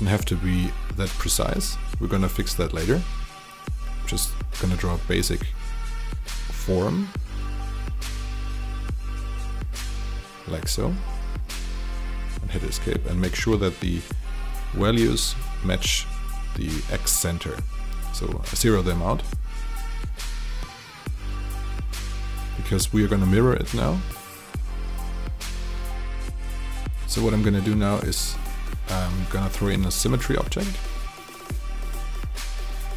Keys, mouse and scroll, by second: 11.7 Escape, 12.7 click, 15.7 KP_0, 17.4 click, 19.7 KP_0, 21.7 click, 23.2 middle click, 25.3 alt+click, 26.4 click, 27.1 alt+click, 29.9 alt+click, 31.0 alt+middle click, 31.6 alt+click, 32.2 alt+middle click, 32.5 alt+right click.